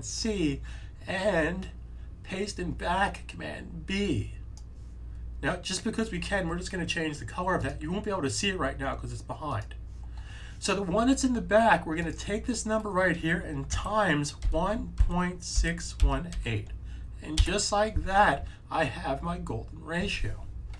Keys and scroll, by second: 13.6-16.8 typing.